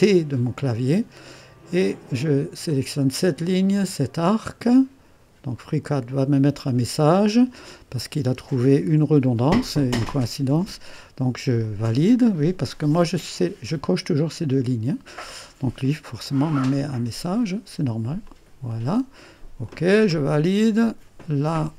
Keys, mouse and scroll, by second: 2.6 click, 5.8 click, 11.6 click, 16.2-18.6 drag, 19.6-20.9 drag, 21.1-21.7 drag.